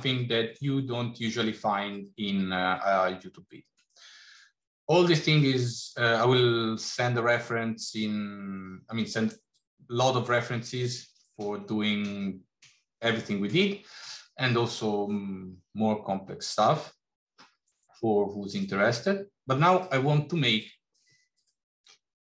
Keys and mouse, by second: 21.5 shift+middle click.